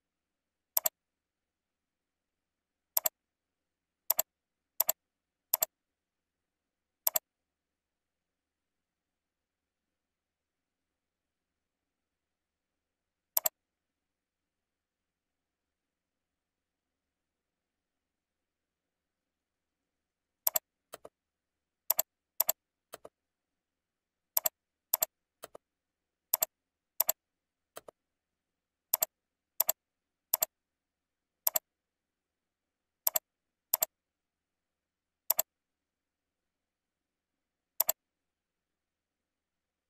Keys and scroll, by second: 32.3 ctrl+c, 34.5 ctrl+v, 36.4 ctrl+r, 37.4 ctrl+b.